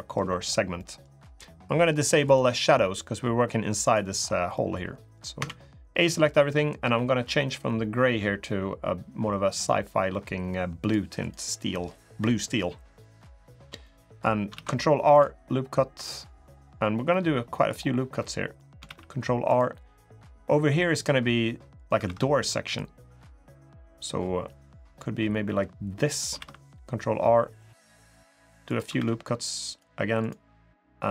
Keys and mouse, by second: 0.5 middle click, 2.1-3.8 drag, 4.3 middle click, 5.1 a, 6.6 g, 11.0 click, 11.3 middle click, 13.6 middle click, 14.3 ctrl+r, 16.9 middle click, 18.0 middle click, 18.7 ctrl+r, 21.8 ctrl+r, 26.2 ctrl+r, 28.7 ctrl+r.